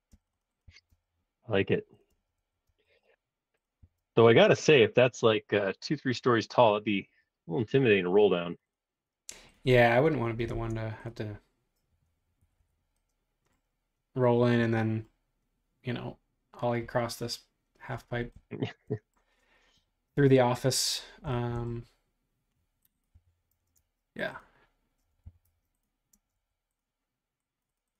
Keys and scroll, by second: 0.3 space, 0.6 b, 2.1 space, 2.4 Escape, 3.0 space, 3.8 b, 6.7 space, 10.5 super+Tab, 12.4 Escape, 12.6 Escape, 23.1-23.5 typing, 25.0-27.3 typing.